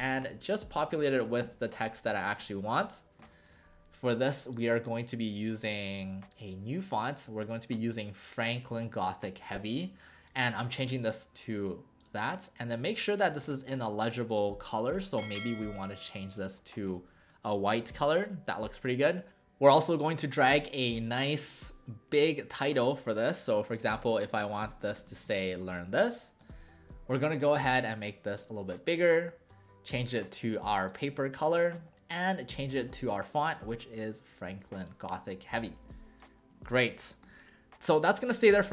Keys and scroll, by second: 0.0-3.2 typing, 1.3 Caps_Lock, 3.2 ctrl+a, 3.5 Caps_Lock, 13.4 ctrl+a, 16.9 w, 23.8-26.3 typing, 24.7 Caps_Lock, 26.5 ctrl+a, 36.5 w, 37.2 w.